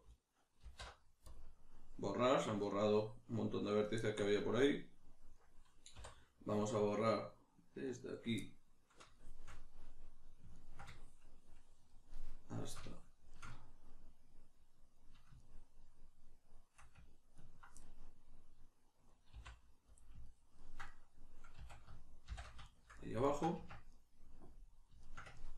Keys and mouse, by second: 0.6 alt+m, 5.9 3, 6.7 right click, 7.9 right click, 9.1-17.4 shift+middle drag, 17.4 ctrl+right click, 17.8-21.6 middle drag, 19.3 x, 21.6 a, 22.3 shift+n, 22.7 shift+middle click, 23.5 Tab, 23.9 middle click.